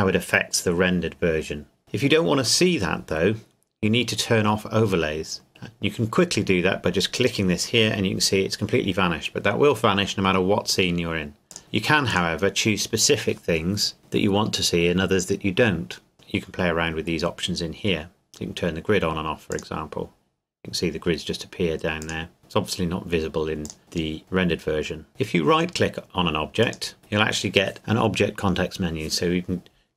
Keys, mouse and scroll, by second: 7.1 click, 11.5 click, 16.1 click, 19.5 click, 22.0 click, 25.1 click, 27.0 right click.